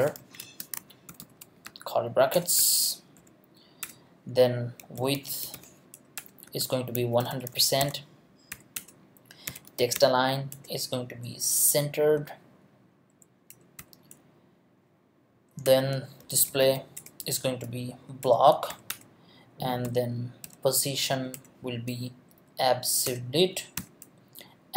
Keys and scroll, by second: 2.1 shift+Left, 2.3 Return, 2.6 BackSpace, 3.2 Left, 3.8 Return, 4.6-7.8 typing, 6.2 Return, 13.8 ;, 15.6 Return, 16.0-17.5 typing, 17.9 Down, 18.2 Return, 18.7 ;, 18.9 Return, 19.8 p, 20.4 o, 21.3 Return, 21.7 space, 22.3 Down, 23.0 Return, 23.8 ;.